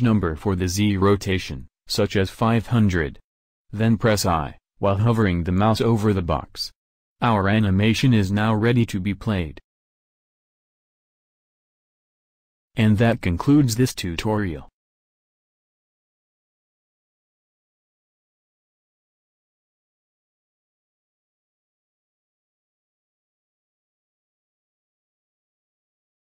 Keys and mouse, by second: 5.2 0, 6.9 i, 16.5-17.5 middle drag, 22.6 click, 24.0 click.